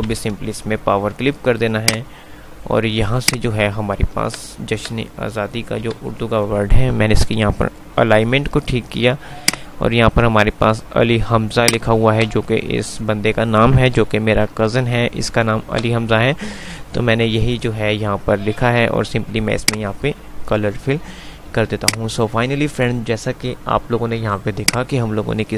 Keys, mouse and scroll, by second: 0.0 c, 2.0 click, 4.4 Right, 6.0 Up, 8.4 F3, 9.7-11.4 drag, 11.4 F2, 11.9 click, 12.0 F2, 14.2 F3, 15.0 F2, 15.7 F2, 16.4 click, 19.7 click, 20.7 F3, 21.7 F2, 22.0 click, 22.2-22.7 F2, 24.9 click.